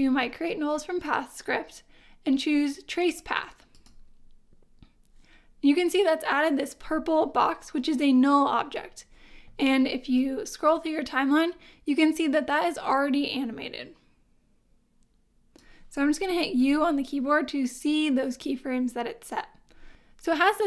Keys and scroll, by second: 16.6 u.